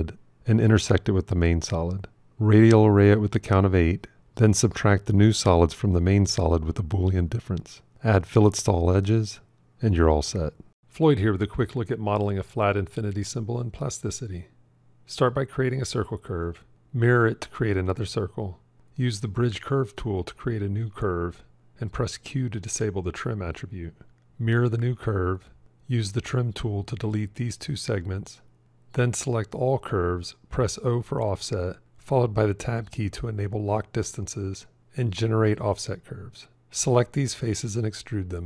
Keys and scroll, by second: 14.8 shift+c, 16.6 alt+x, 22.0 q, 24.3 alt+x, 25.9 t, 31.2 o, 31.4 Tab.